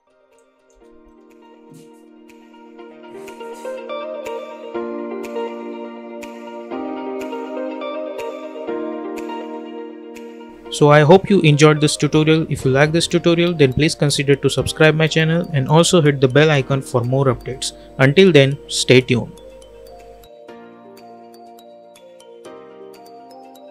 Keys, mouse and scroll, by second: 0.6 space.